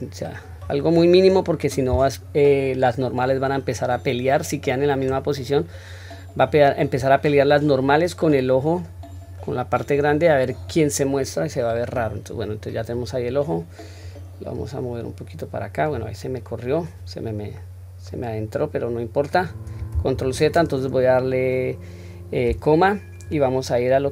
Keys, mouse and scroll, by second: 0.9 scroll down 1, 1.2-5.1 middle drag, 9.0-9.5 scroll down 2, 9.4-9.8 middle drag, 10.5 click, 11.1-11.6 middle drag, 11.9-12.9 scroll up 3, 12.9 click, 13.5 middle click, 14.6 click, 16.2-16.9 middle drag, 17.1 scroll down 1, 17.6-18.1 middle drag, 19.9 ctrl+z.